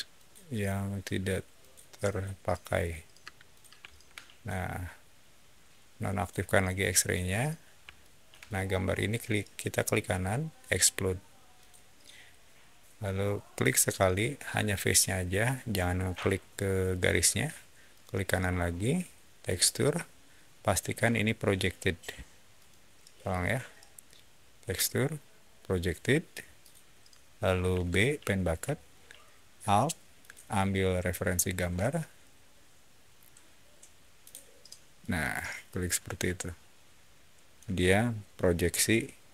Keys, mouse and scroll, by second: 0.0 click, 1.5 click, 1.9 click, 2.5 click, 3.1 space, 3.4 click, 3.8 shift+middle click, 6.0 shift+click, 6.9 shift+click, 7.6 shift+middle click, 7.9 shift+middle click, 8.8 shift+right click, 11.4 shift+click, 13.5 shift+click, 17.8 shift+right click, 22.4 shift+right click, 23.2 shift+right drag, 26.5 shift+drag, 27.6 b, 30.1 alt+click, 34.1 alt+click, 34.9-37.4 alt+middle drag, 38.8-39.3 alt+middle drag.